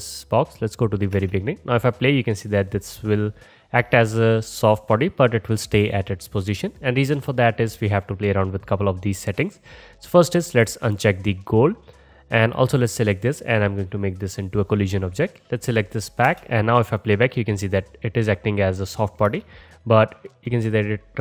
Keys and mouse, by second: 3.8 space, 10.6-12.5 middle drag, 12.5 click, 12.7-14.0 middle drag, 14.0-15.2 drag, 15.2-20.3 middle drag, 16.3 space, 19.3 space, 20.3-21.2 drag.